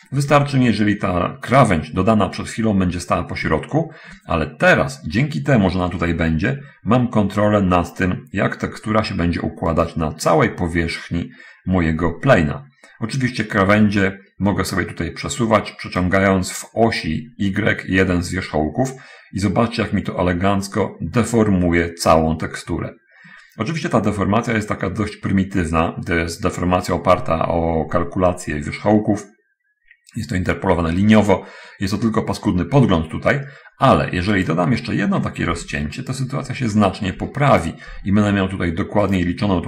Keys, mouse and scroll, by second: 0.7 Escape, 10.1 right click, 16.3-35.0 drag, 34.3 Escape, 35.9 ctrl+r, 36.2 ctrl+click, 37.3 ctrl+r, 37.7 ctrl+click, 39.4 right click.